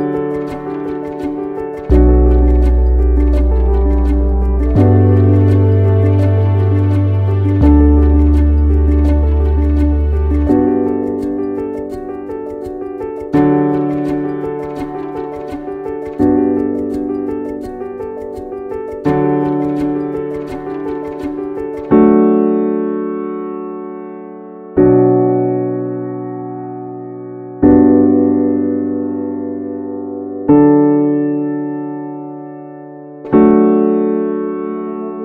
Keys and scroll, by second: 32.5 ctrl+s.